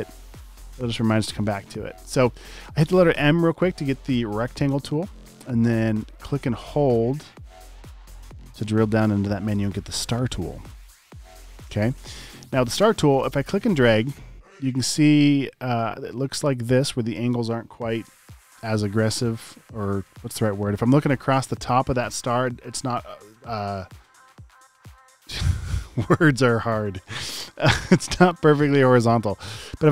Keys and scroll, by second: 12.2 space, 12.7 space.